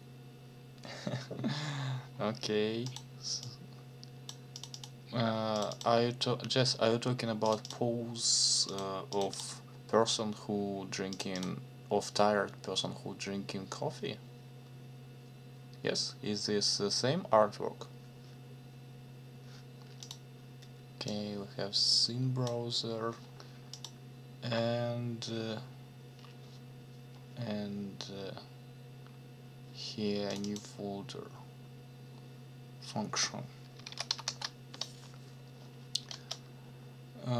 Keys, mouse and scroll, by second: 2.9 click, 3.4 click, 4.5 click, 5.5 click, 7.4 click, 8.7 click, 9.1 click, 11.1 click, 20.0 click, 21.1-22.6 drag, 23.7 click, 29.0 scroll down 1, 30.3 click, 33.9 ctrl+c, 34.1 ctrl+f, 34.2 ctrl+v, 36.1 Return.